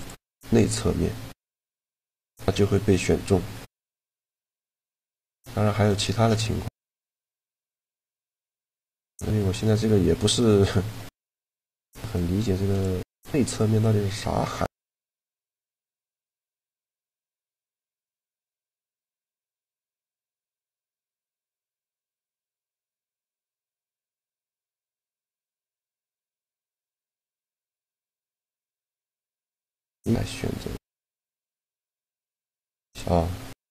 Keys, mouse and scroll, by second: 3.4-7.8 middle drag, 7.8 z, 8.2-9.8 right drag, 8.6-10.3 middle drag, 10.7 e, 11.6-13.4 drag, 12.7 e, 15.8 click, 17.0-18.6 drag, 17.7-20.6 right drag, 19.5 e, 20.4-22.3 drag, 22.5-24.2 drag, 22.8 z, 24.9-26.6 drag, 25.4-27.4 right drag, 25.8 f, 26.1 a, 28.2-30.1 drag, 31.7 click, 32.4-33.7 middle drag.